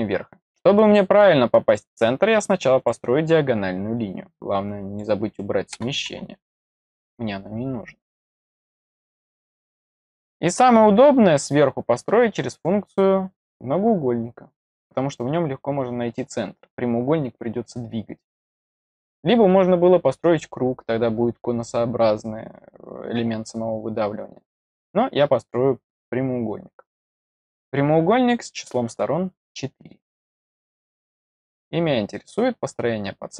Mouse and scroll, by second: 1.6 click, 2.7 click, 4.6 click, 8.5 click, 26.8 click, 28.2 click, 32.0 click.